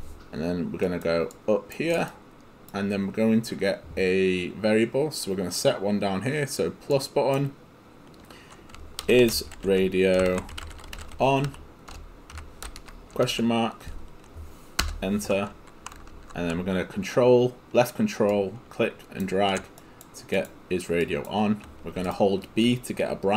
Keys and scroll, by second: 8.8-12.4 typing, 14.8 Return.